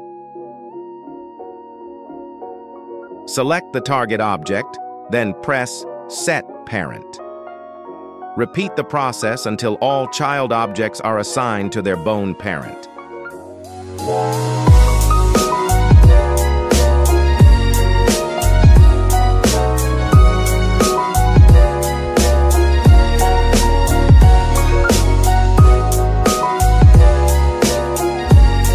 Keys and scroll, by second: 4.3 g, 4.8 Escape, 7.9 g, 8.3 Escape, 26.5 ctrl+Tab.